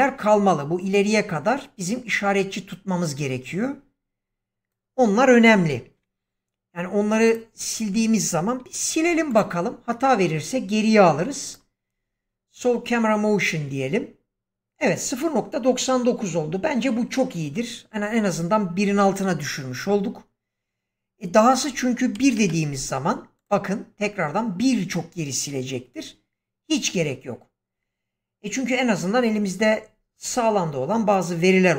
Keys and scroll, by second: 5.6 shift+Left, 8.9 x, 22.1 1, 22.3 Return.